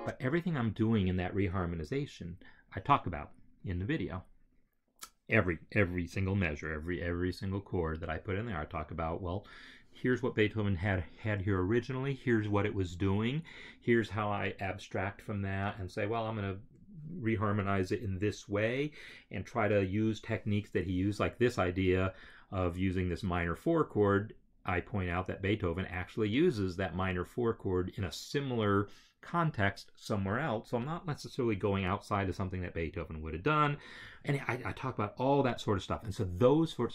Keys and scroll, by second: 0.0 space.